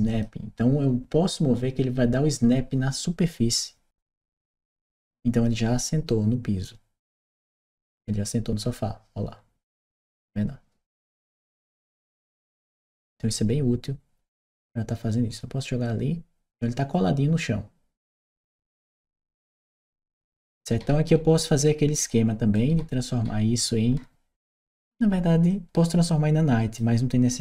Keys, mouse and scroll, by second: 4.1-17.8 drag, 18.5-21.4 right drag, 19.2 w, 19.8 a, 21.0 s, 21.9 s, 22.4-24.4 right drag, 23.0 a, 23.7 d, 25.3-26.6 drag.